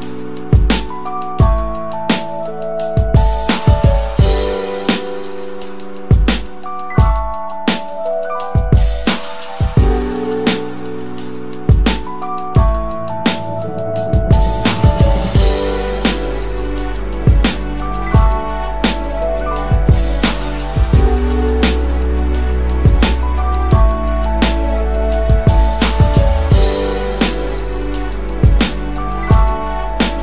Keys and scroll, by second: 28.5-29.9 typing.